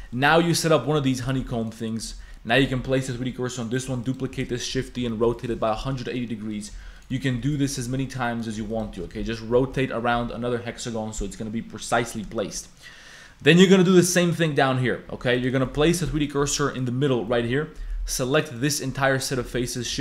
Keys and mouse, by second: 0.1 shift+click, 1.0-4.3 typing, 1.1 click, 5.5 a, 6.5 click, 6.8-9.0 typing, 7.2 shift+click, 10.1 a, 12.4 shift+click, 15.1-18.0 typing, 15.3 click, 15.9 click, 16.2 shift+click, 19.4 shift+d, 19.9 r.